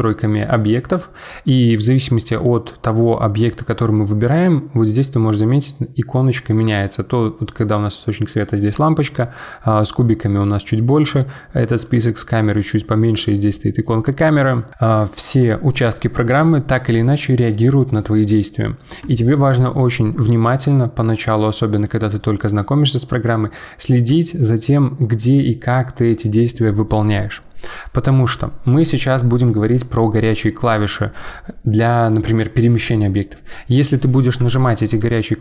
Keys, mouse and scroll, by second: 2.3 click, 3.5 click, 9.1 click, 11.8 click, 34.9 click.